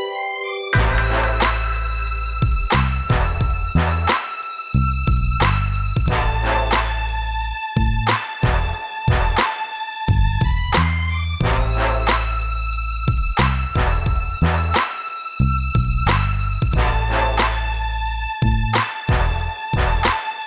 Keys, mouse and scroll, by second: 0.0 middle click, 0.8 scroll down 2, 1.8 click, 3.2 click, 3.6 click, 5.2 click, 8.2 click, 11.7 middle click, 13.3 scroll up 2, 14.1 click, 17.8 scroll down 2, 18.7 click.